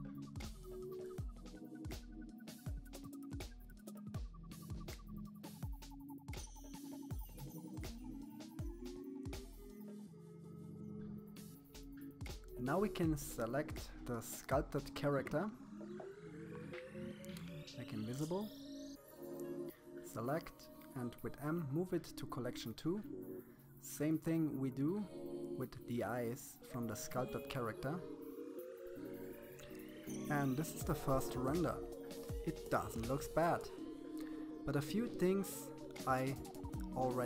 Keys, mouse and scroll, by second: 0.1-1.1 middle drag, 1.1 KP_3, 1.4 scroll up 1, 1.7 click, 2.8 click, 3.4 click, 4.1 click, 4.9 KP_7, 5.3 click, 6.2 click, 6.4 click, 7.1 click, 7.7 middle click, 8.2 click, 9.4 click, 10.0 click, 10.4 middle click, 10.9-12.1 drag, 15.5-17.0 shift+middle drag, 17.3 click, 18.0 click, 19.5 m, 21.9-22.9 scroll down 2, 22.9 click, 23.7 click, 24.4 click, 25.6 m, 26.8 click, 27.9 m.